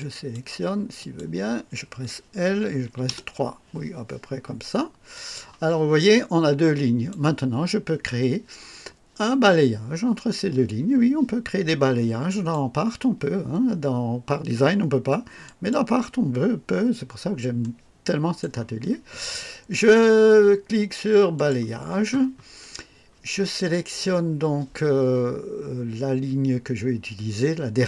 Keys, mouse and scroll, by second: 0.9 click, 2.4 l, 2.8 KP_3, 3.2 KP_Enter, 5.1 click, 6.0-7.2 drag, 12.2 click, 15.4 click, 16.9-17.2 scroll up 1, 17.6-18.6 right drag, 21.3 click.